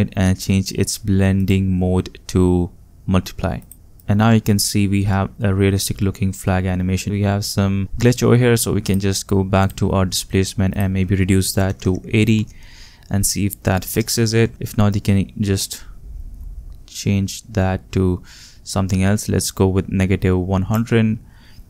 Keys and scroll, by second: 11.4-12.3 typing, 12.3 Return, 14.4 8, 14.5 Return.